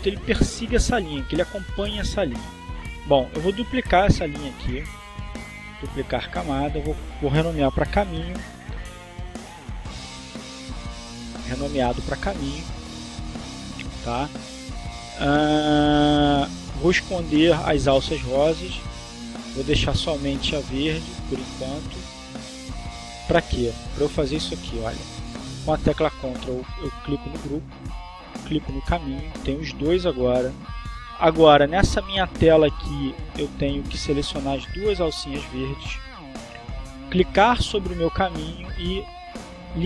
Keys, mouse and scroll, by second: 4.8 right click, 6.3 click, 7.9-9.5 typing, 10.1 Return, 14.4 click, 18.4 click, 19.5 click, 22.7 click, 24.4 click, 28.9 ctrl+click, 34.2 ctrl+click, 35.5 click, 38.1 right click.